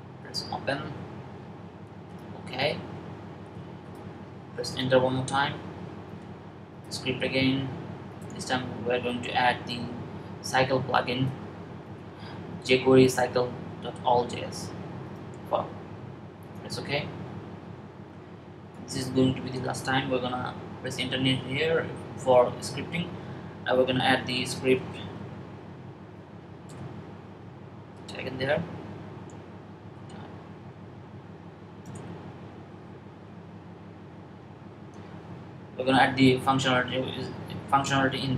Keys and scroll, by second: 23.7-25.3 typing, 28.2-29.7 typing, 32.9 Down, 33.2 Down, 33.4 Down, 33.7 Down, 34.2 Down.